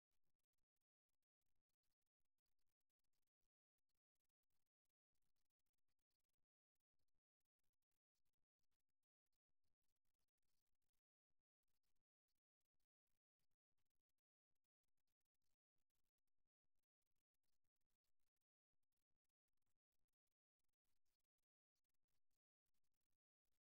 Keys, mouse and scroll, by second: 0.0-1.9 drag, 5.5-7.5 right drag, 9.0-11.9 middle drag, 12.7-14.7 right drag, 19.8-21.7 drag, 21.9-23.6 right drag.